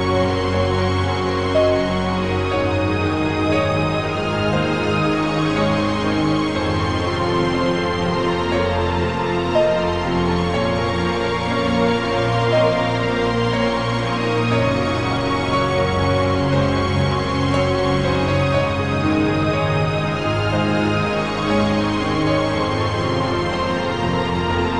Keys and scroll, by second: 0.0-0.1 typing, 11.7 i, 13.3 i.